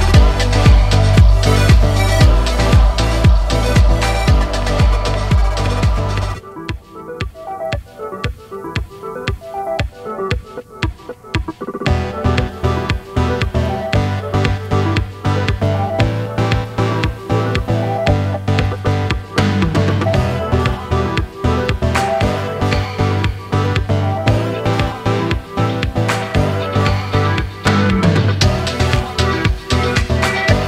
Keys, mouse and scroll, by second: 0.4 ctrl+t, 2.6 ctrl+r, 5.3-8.9 middle drag, 9.1 alt+shift+click, 10.6 alt+shift+click, 11.2 alt+shift+click, 11.7 alt+shift+click, 12.2 alt+shift+click, 13.4 shift+click, 14.3 shift+click, 15.1 alt+shift+click, 15.6 alt+shift+click, 16.5-18.2 middle drag, 18.2 alt+e, 24.1-26.7 middle drag, 26.7 scroll up 2, 27.1-28.3 middle drag, 28.3 2, 29.9 click, 30.5 alt+click.